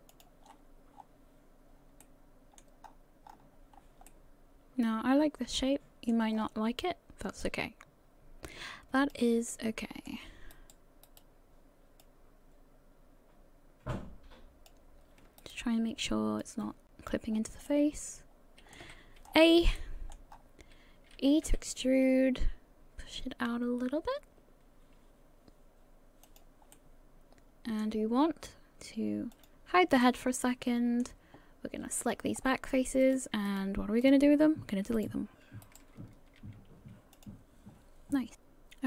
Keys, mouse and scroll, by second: 0.5-1.6 scroll down 11, 2.0 middle click, 2.9-3.7 scroll up 8, 3.7 scroll down 2, 4.1 middle click, 6.3-6.9 scroll up 2, 7.4 click, 10.2 middle click, 10.5 right click, 11.1 right click, 12.0 click, 15.4 shift+right click, 16.4 click, 17.3-17.7 scroll down 4, 17.7 middle click, 18.8 a, 19.2 scroll down 3, 19.8 middle click, 20.3-20.7 scroll up 5, 21.4 e, 26.7 middle click, 29.3 click, 30.0 middle click, 32.0 click, 32.3-33.0 scroll up 3, 33.0 right click, 33.5 shift+right click, 34.0 shift+right click, 34.4-35.0 scroll down 2, 35.0 shift+right click, 35.9 shift+right click, 36.4 x, 37.7-38.3 scroll down 3, 38.3 click.